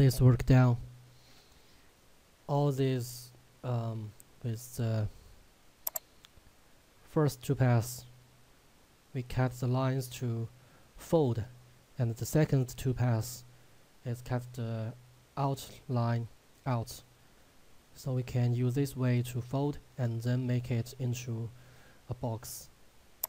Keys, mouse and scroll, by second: 5.9 click.